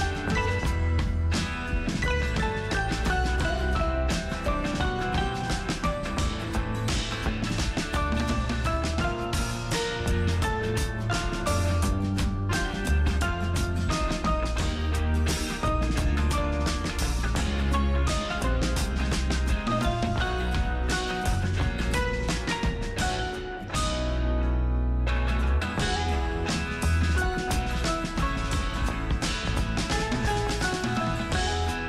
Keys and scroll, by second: 27.4 space, 31.0 ctrl+alt+z.